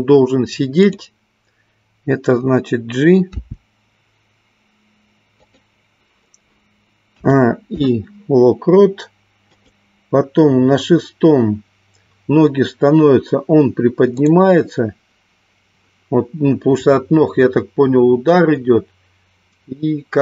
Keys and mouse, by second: 0.9 click, 3.5 g, 8.1 i, 10.6-11.6 drag, 14.7 click.